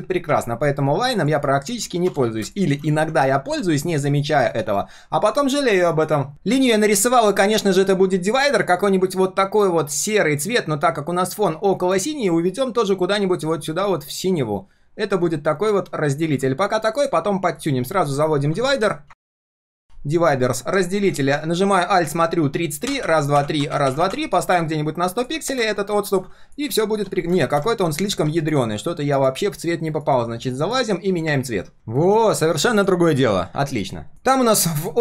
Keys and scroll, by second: 31.7 ctrl+v.